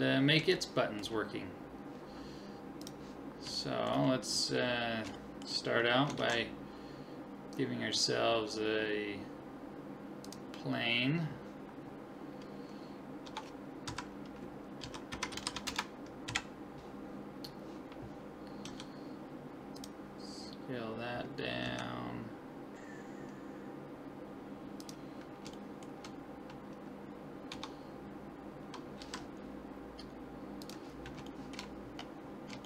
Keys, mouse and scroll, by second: 0.6-2.5 middle drag, 2.8-4.7 drag, 3.6-6.9 middle drag, 6.2 shift+a, 13.2 Tab, 13.9 KP_3, 14.8 r, 16.3 KP_1, 17.4-19.2 middle drag, 18.7 s, 20.3-22.3 middle drag, 21.6 s, 25.6-27.3 middle drag, 27.5 Tab, 29.0 g, 29.4 middle click, 29.8 middle click, 31.3-32.6 middle drag.